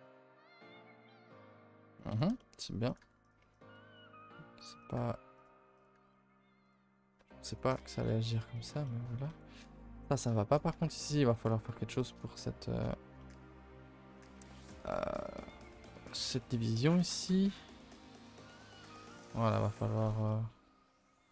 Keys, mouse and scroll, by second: 1.0 click, 2.9 click, 3.5 click, 4.8 click, 5.7 click, 11.0 middle click, 11.3-11.7 scroll up 5, 12.0 shift+middle click, 12.2 scroll up 5, 19.5 middle click, 20.3 middle click, 21.0 click, 21.2 middle click.